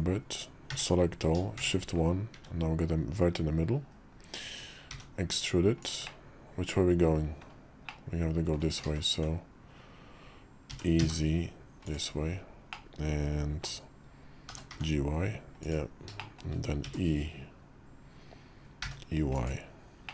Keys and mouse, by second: 1.2 a, 1.3 shift+1, 2.1 `, 3.7 KP_5, 4.7 e, 6.0-7.2 drag, 7.7 click, 8.6 ctrl+z, 10.5 e, 12.6 middle click, 14.3 g, 16.1 shift+click, 16.6 e, 19.9 click.